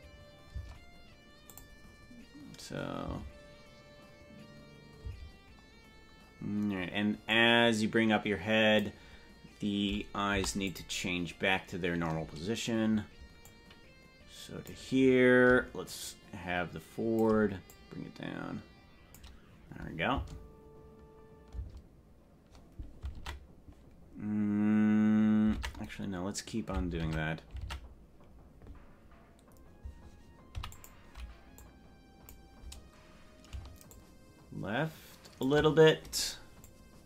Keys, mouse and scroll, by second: 0.5 space, 1.4 click, 1.9 scroll up 2, 3.1 space, 5.1 space, 7.3-8.8 drag, 10.4 i, 13.5-14.8 drag, 15.8-17.2 shift+drag, 17.6-19.1 drag, 20.2 space, 21.6 space, 23.2 ctrl+Tab, 25.6 ctrl+Tab, 27.0 ctrl+Tab, 27.6 ctrl+Tab, 30.6 i, 31.6 click, 33.8-35.5 shift+drag, 36.6-37.0 drag.